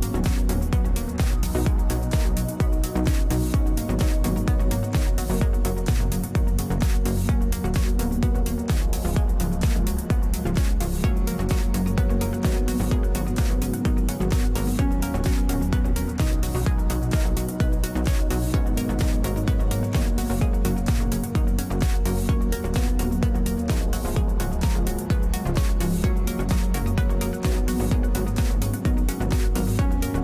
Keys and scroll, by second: 1.9 space, 2.8 space, 11.4 Return, 13.6 space, 14.5 space, 23.1 alt+space, 24.6 space, 26.0 space, 26.6 space, 28.8 f.